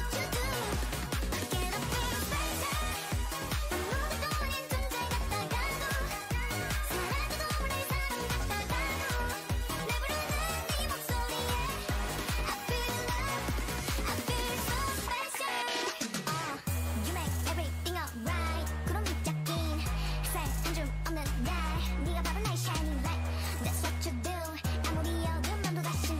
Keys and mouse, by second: 4.2-7.6 typing, 10.7 e, 11.5 e, 12.2 e, 13.0 e, 14.5 e, 16.5 e, 17.7-20.7 typing, 22.4 e, 23.7 e, 24.4 e.